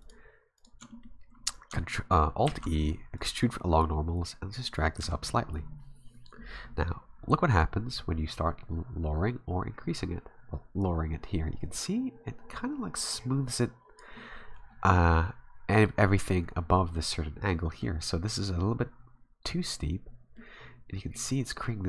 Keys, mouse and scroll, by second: 0.0 alt+shift+right click, 0.6 alt+right click, 0.9 middle click, 2.5 alt+e, 5.0 Tab, 5.3 middle click, 5.7 scroll down 1, 7.9 click, 14.5-16.9 scroll down 2, 16.9 middle click, 20.4 middle click.